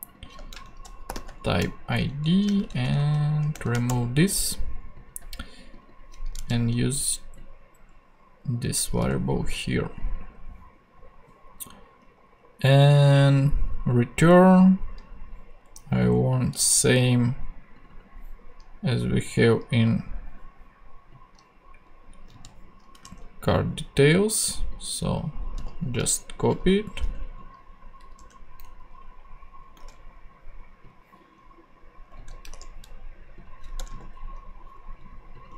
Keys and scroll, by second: 0.5 shift+Right, 0.8-1.6 typing, 2.0 shift+Right, 2.3 Left, 3.9 shift+BackSpace, 4.8 BackSpace, 6.3 super+c, 9.0 super+v, 22.3 super+c, 23.0 ctrl+super+c, 23.5 ctrl+Tab, 26.8 Left, 27.0 Tab, 28.0 Up, 28.2 Tab, 28.6 Down, 29.8 ctrl+Tab, 32.1 super+c, 32.5 ctrl+super+Tab, 33.3 ctrl+Tab, 33.8 Return.